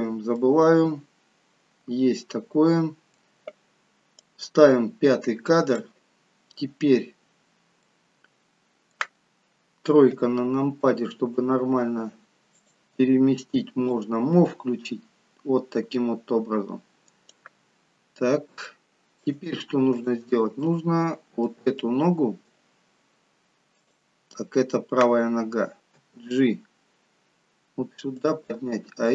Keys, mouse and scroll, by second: 0.3 middle click, 4.3 click, 6.1-6.9 scroll down 5, 6.9 scroll up 1, 7.8 middle click, 10.1 KP_3, 12.6 click, 13.9 click, 17.7-18.5 scroll up 3, 18.7 shift+middle click, 19.9 click, 20.6 middle click, 21.7 middle click, 23.8 click, 26.0 g.